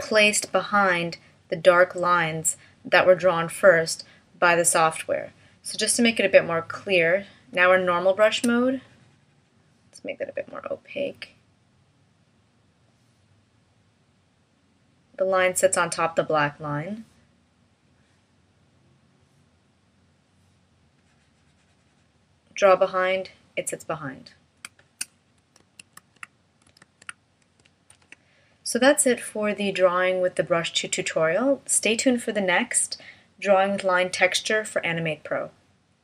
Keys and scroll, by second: 25.6 super+z, 26.8 super+z, 27.9 shift+m.